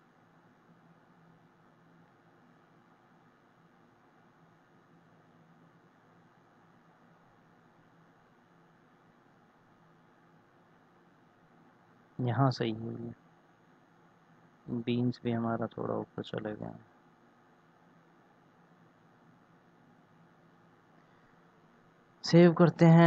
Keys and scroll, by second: 21.6 ctrl+s.